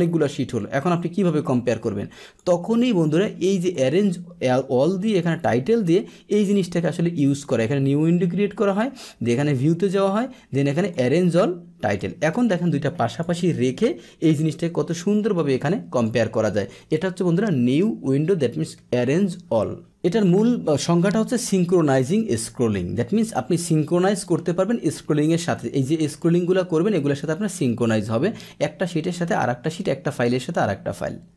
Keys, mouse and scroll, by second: 0.5-2.3 drag, 2.6 click, 3.6 click, 5.2 click, 6.8 click, 7.4 click, 9.4 click, 10.8 click, 11.8 click, 13.0 click, 14.3-16.0 drag, 23.9 click, 26.1-27.1 drag.